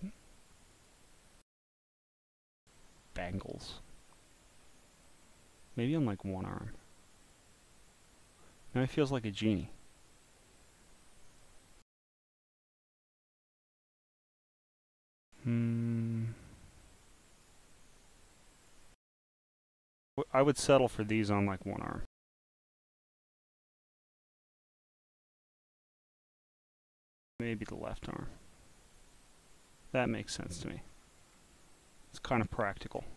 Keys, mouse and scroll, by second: 0.7 click, 2.4 click, 3.1 click, 4.9 click, 5.7 click, 6.6 click, 7.3-8.7 drag, 9.1 scroll down 4, 9.2-9.5 scroll up 6, 9.7 click, 10.5 click, 11.1 click, 12.8 click, 14.4-15.5 scroll down 1, 16.3 click, 17.3 click, 18.2 click, 19.7 click, 20.9 click, 22.6 click, 23.5 click, 24.5 click, 26.4 click, 26.9 click, 27.7-30.5 drag, 30.8-31.2 scroll up 2, 31.2-31.6 scroll down 1, 31.6-32.8 drag.